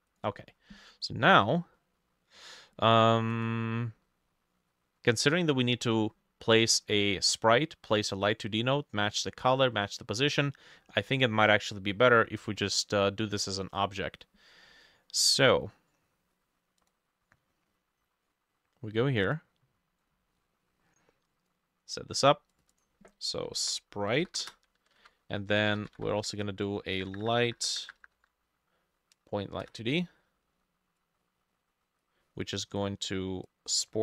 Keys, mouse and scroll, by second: 1.8 middle click, 4.1 middle click, 17.7-18.3 scroll down 1, 18.3-19.9 scroll down 3, 22.8 double click, 23.3-26.5 typing, 25.0 ctrl+a, 25.9-34.0 drag, 27.0 Up, 27.1 Up, 27.3 Up, 27.4 Up, 27.5 Up, 27.6 Up, 27.8 Up, 27.9 Up, 28.2 Up, 29.7 Return.